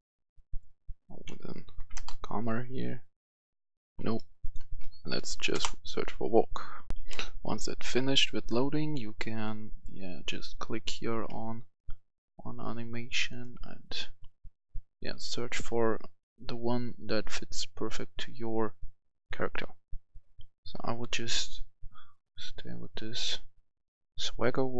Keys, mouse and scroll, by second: 0.5 click, 1.4 Left, 1.9 Return, 4.1 BackSpace, 4.4 click, 4.6 BackSpace, 5.5 Return, 6.9 click, 6.9 F10, 9.3 click, 14.2-16.8 scroll down 1, 20.7 scroll up 1.